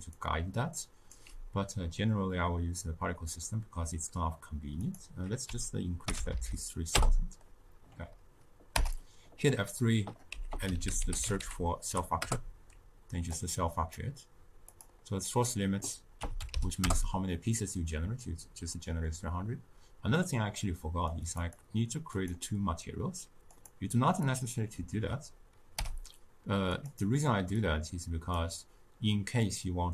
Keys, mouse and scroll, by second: 0.1-6.9 right drag, 6.9 0, 13.5 0, 16.8 0, 22.2-26.8 drag, 27.8-29.9 drag.